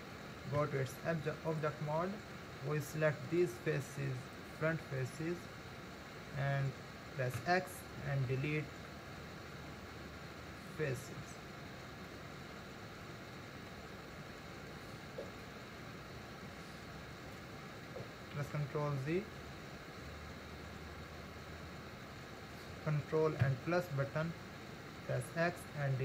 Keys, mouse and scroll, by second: 0.6 Tab, 3.4 click, 5.0-7.4 middle drag, 7.4 x, 12.1-14.1 middle drag, 14.1-15.2 scroll up 1, 15.2-16.6 scroll up 1, 18.8 ctrl+z, 23.4 ctrl+KP_Add, 25.2 x.